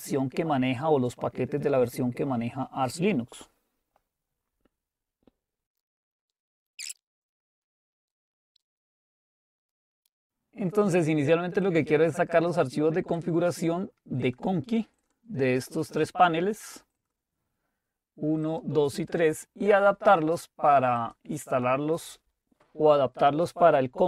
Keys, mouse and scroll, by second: 9.8 click, 12.0-14.8 drag, 15.0 click, 15.6 click, 15.9-20.0 drag, 21.0 click.